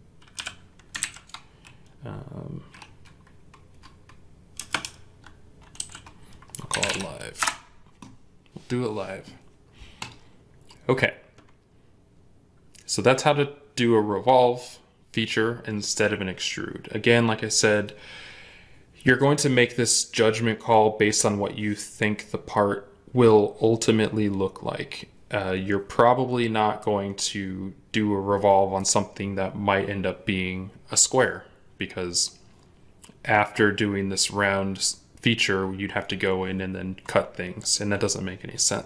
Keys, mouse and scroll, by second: 0.0-0.7 typing, 4.2-7.2 typing.